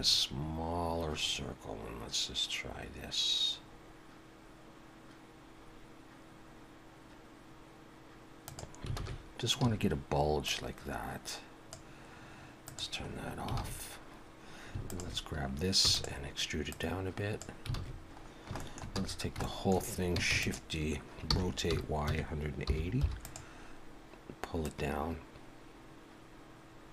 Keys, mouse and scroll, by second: 9.0 alt+a, 9.6 a, 10.5 click, 12.7 click, 13.1-13.6 scroll up 3, 13.6 alt+a, 14.9 alt+shift+click, 15.8 e, 16.7 click, 17.7 alt+a, 18.3 scroll down 1, 18.6 shift+middle click, 18.9 a, 19.1 scroll down 3, 19.4 shift+middle click, 20.3 shift+d, 21.3 r, 24.6 click.